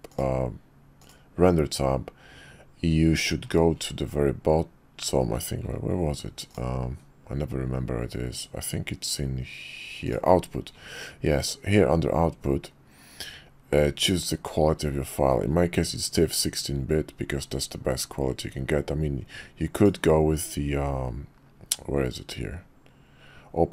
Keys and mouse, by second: 0.1 click, 1.1 click, 6.5 click, 19.8-23.7 drag.